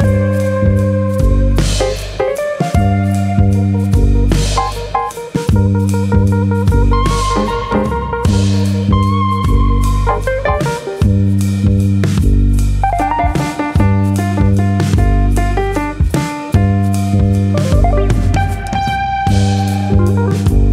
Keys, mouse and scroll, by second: 2.3 ctrl+KP_Add, 2.9 shift+middle click, 4.8 e, 5.3 click, 5.5 e, 8.5 click, 8.7-9.1 scroll down 3, 8.9 shift+middle click, 9.1 middle click, 9.5 shift+middle click, 9.8 middle click, 11.5 KP_3, 12.8 alt+click, 13.3 click, 15.3 alt+click, 15.8 click, 16.8 middle click, 18.0 alt+click, 19.2 middle click, 19.3 g, 20.2 click, 20.4 middle click.